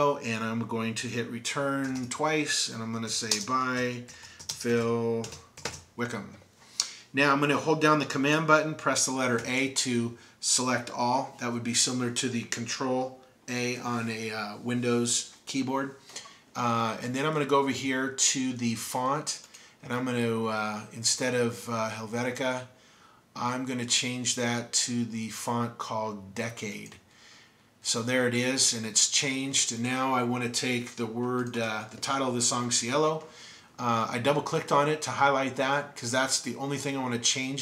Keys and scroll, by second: 1.4-5.9 typing, 8.0 typing, 9.4 super+a.